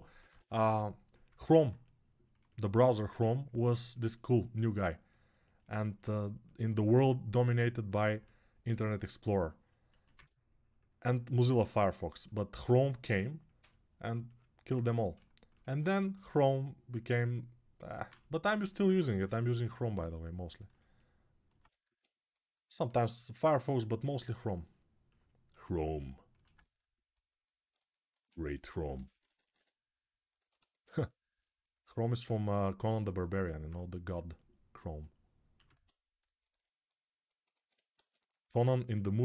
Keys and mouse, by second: 0.1 [, 1.1-15.6 alt+drag, 15.0 alt+shift+1, 17.8-31.6 shift+drag, 28.3 g, 28.7 ], 36.6-39.2 drag, 37.3 alt+q, 37.7 Tab.